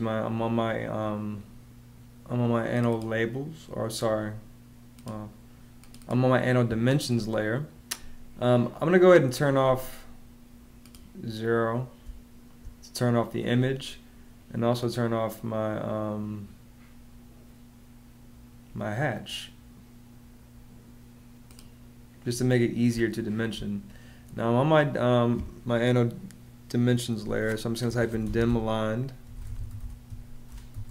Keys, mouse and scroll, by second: 11.8 space, 22.7 space, 27.4-30.9 typing.